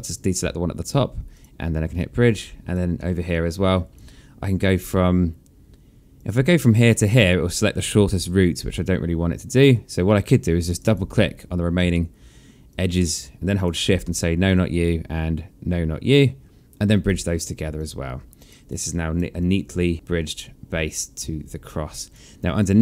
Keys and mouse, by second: 0.9 click, 1.6 alt+click, 2.6 alt+middle click, 2.9 alt+click, 5.8 click, 6.3 shift+click, 10.3 click, 11.5 alt+middle click, 12.3 alt+click, 13.2 shift+click, 16.6 click, 17.4 alt+click, 18.3 right click, 19.0 alt+click, 21.2 alt+click, 22.2 alt+click.